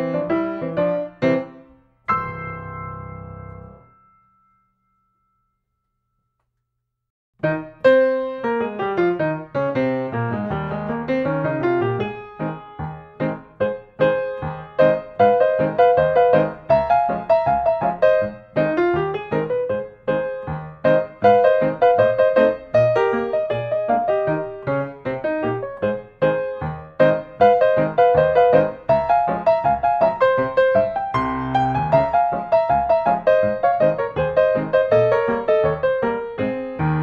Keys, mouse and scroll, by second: 4.5 click, 5.9 click, 6.0 Escape, 8.1 click, 10.7 click, 11.4 click, 12.4 1, 13.3 BackSpace, 14.2 Return, 16.5 click, 17.1 click, 18.0 8, 18.3 Return, 20.7 click, 22.0 click, 22.6-24.0 typing, 24.3 Return, 25.6 Escape, 26.9 click, 28.1-29.3 drag, 29.9-31.0 drag, 32.2 s, 33.2-34.2 drag, 34.6-35.7 drag, 36.2-37.0 drag.